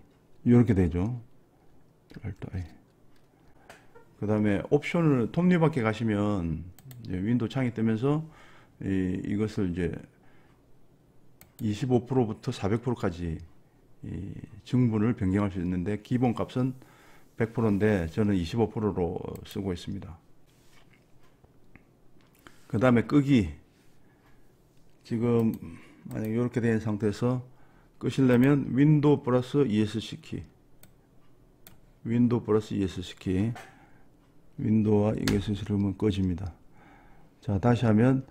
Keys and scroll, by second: 2.4 ctrl+alt+i, 35.2 super+Escape.